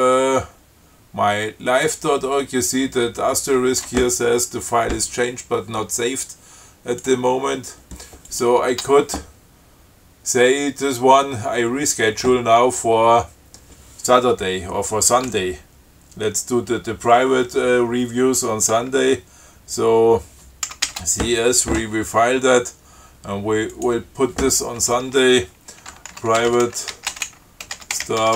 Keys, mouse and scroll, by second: 8.6 click, 8.9 Tab, 20.9 ctrl+c, 21.1 ctrl+s, 23.9 click, 26.1-28.3 typing.